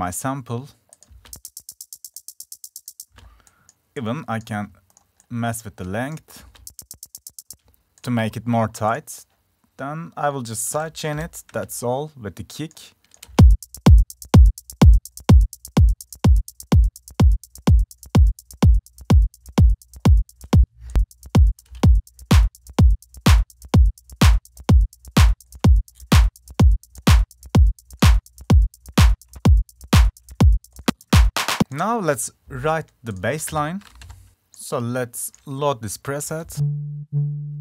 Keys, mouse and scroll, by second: 0.7 F1, 1.5 click, 8.2 right click, 11.1 click, 14.5 click, 16.1 click, 17.3 click, 18.1 click, 20.3 click, 31.6 F1, 31.6-32.6 drag, 32.8 click.